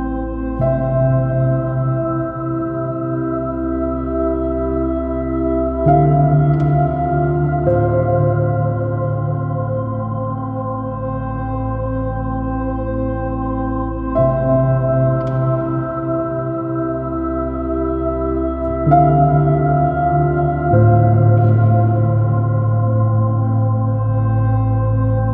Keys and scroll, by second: 2.8 super+r, 2.8 ↺, 3.1 super+0, 4.1 super+i, 5.3 p, 5.4 super++, 5.6 super+space, 10.6 space, 16.4 space, 17.8 space, 19.0 super+space, 19.5 space, 20.7 super+space, 22.1 space.